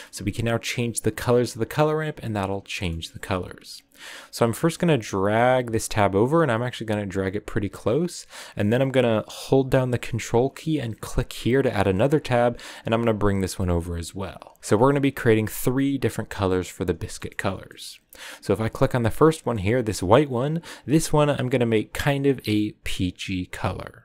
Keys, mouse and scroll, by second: 4.7-7.6 drag.